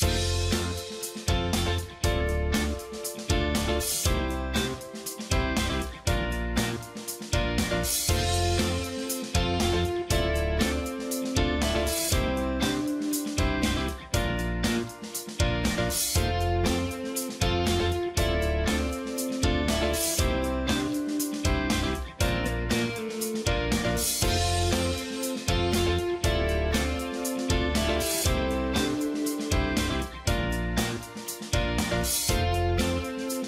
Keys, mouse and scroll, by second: 5.1-7.0 ctrl+drag, 8.8-10.7 ctrl+drag, 10.9-13.8 ctrl+drag, 16.0-17.7 ctrl+drag, 19.7-20.9 ctrl+drag, 22.8 ctrl+click, 24.1-25.6 ctrl+drag, 27.9 ctrl+click, 29.0 ctrl+click, 31.1 ctrl+], 32.1 ctrl+click.